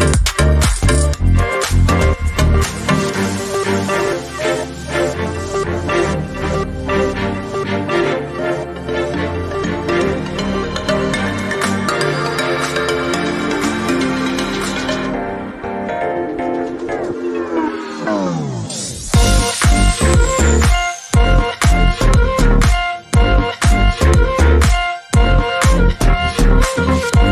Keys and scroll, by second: 0.0-0.5 Left, 0.8-1.2 Up, 4.3 Right, 4.9 Right, 5.6 Right, 20.0 Up, 20.2 Up, 20.3 Up, 20.9 Up, 21.9 Up, 21.9 Left, 22.5 Left, 23.6 Left, 24.1 Right.